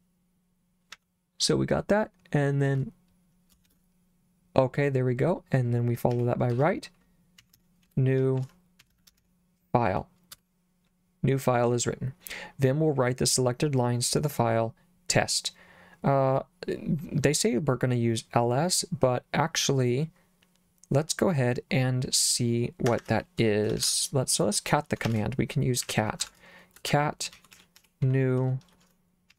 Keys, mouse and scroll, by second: 0.9 j, 3.7 shift+;, 6.2-9.7 typing, 10.4 Return, 22.9 Escape, 23.8 shift+;, 25.1-29.3 typing.